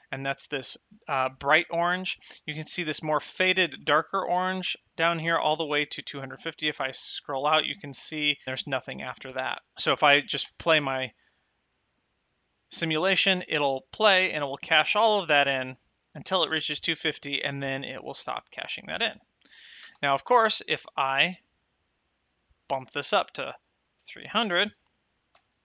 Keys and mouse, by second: 10.3 space, 19.7 space, 22.1 click, 23.6 KP_3, 24.3 KP_0.